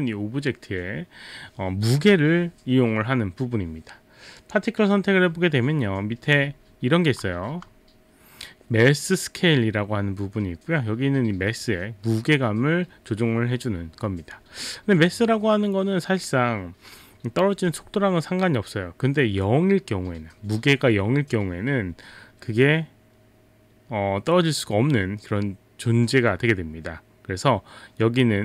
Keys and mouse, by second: 4.4 click.